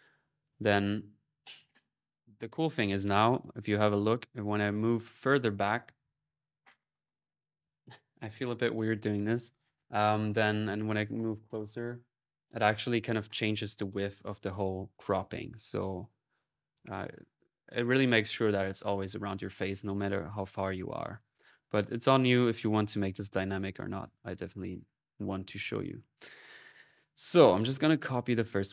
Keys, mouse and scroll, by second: 0.0 typing, 15.1 middle click, 19.3 middle click, 20.1 click, 21.2 click, 24.6-25.8 drag, 27.0-28.7 drag.